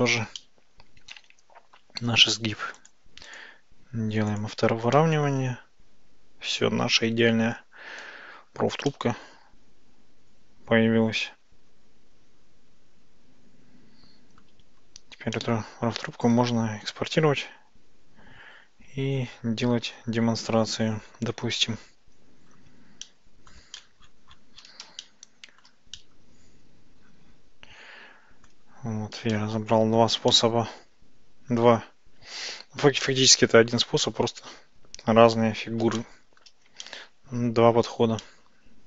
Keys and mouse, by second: 0.4-1.9 middle drag, 3.3 click, 4.3 click, 5.0-7.7 middle drag, 8.1 Tab, 8.9-14.5 middle drag, 15.4-19.8 middle drag, 23.1-23.6 middle drag, 23.8 middle click, 25.1-25.7 shift+middle drag, 26.0-28.6 middle drag, 29.4-29.7 shift+middle drag, 30.4-31.6 middle drag, 33.1 shift+middle click, 34.1-35.7 ctrl+middle drag, 36.1 shift+middle click, 36.9-38.0 ctrl+middle drag, 38.3-38.8 middle drag.